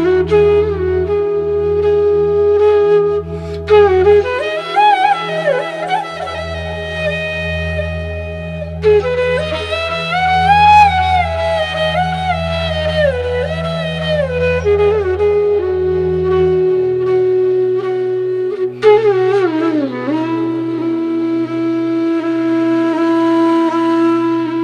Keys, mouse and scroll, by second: 1.8 click, 4.9-7.5 drag, 10.0 click, 12.4-24.6 drag.